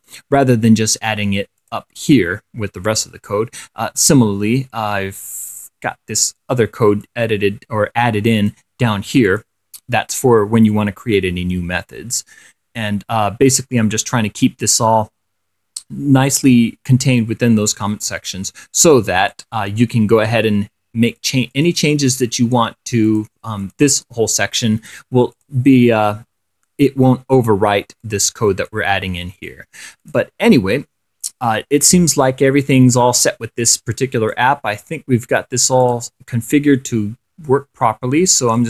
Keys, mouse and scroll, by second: 0.2 click, 0.7-1.4 scroll up 2, 1.8 click, 3.1-4.5 drag, 4.8-6.0 scroll down 2, 6.0 scroll up 1, 6.1 scroll down 1, 7.3-8.9 drag, 9.5 click, 11.0-18.9 drag, 19.5 click, 21.3 click, 21.7 click, 23.3 click, 23.9 click, 25.6 click, 28.3 click, 29.6 click, 30.3 click, 31.4-34.8 drag, 36.1 click.